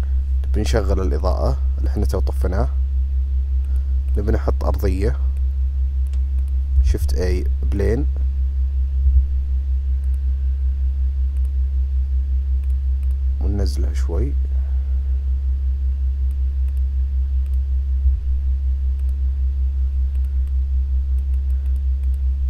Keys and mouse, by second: 0.0 click, 1.2 click, 1.9 click, 3.7 click, 4.2 click, 5.5 click, 6.4 click, 6.9 shift+a, 9.1 s, 12.7 click, 14.0 click, 14.2 click, 14.4-16.4 drag, 17.5 click, 18.1 s, 20.8-21.5 drag.